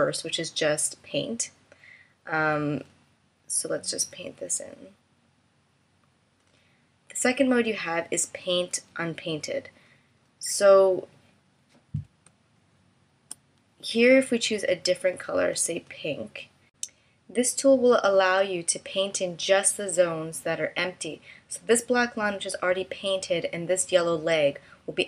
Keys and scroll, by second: 10.4 space.